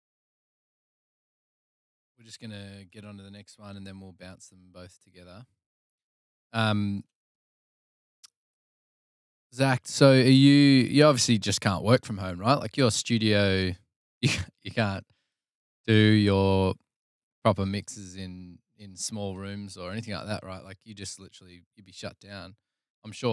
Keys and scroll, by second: 3.6 super+d, 7.3 super+c, 9.3 super+v.